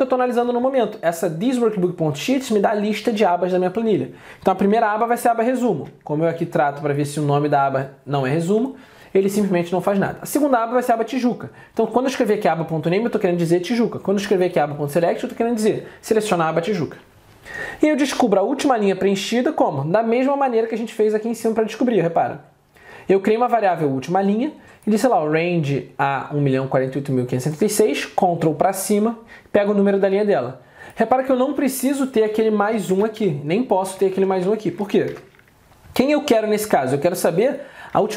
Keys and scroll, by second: 4.8 alt+Tab, 36.1 alt+Tab.